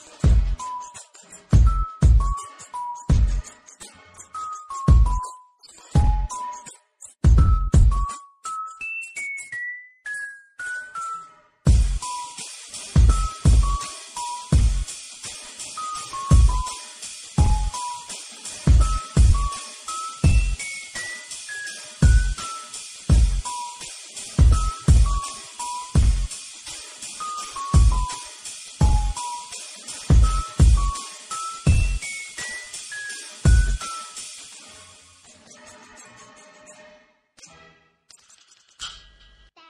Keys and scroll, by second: 3.5 ctrl+z, 3.6-4.2 ctrl+z, 6.4 ctrl+t, 12.1 alt+space, 12.9 ctrl+alt+j, 13.0 t, 19.8 ctrl+z, 25.0 space, 27.5 ctrl+z, 35.8 ctrl+z, 39.1 alt+space.